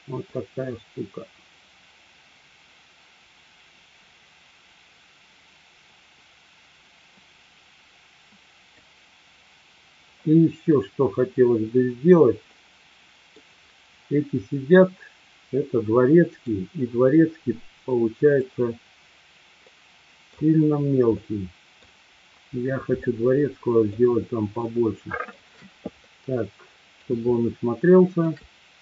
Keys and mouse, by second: 1.9-11.1 drag, 12.5-13.3 middle drag, 16.4 click, 19.7-20.4 middle drag, 21.2-21.9 middle drag, 23.1 shift+middle click, 24.6 shift+middle click, 26.0-27.0 middle drag, 27.5-28.3 shift+middle drag.